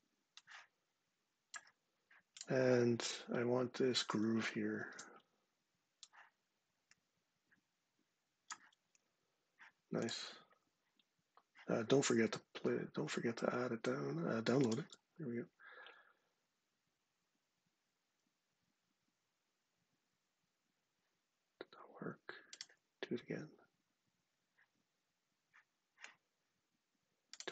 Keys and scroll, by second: 4.5 shift+super+4.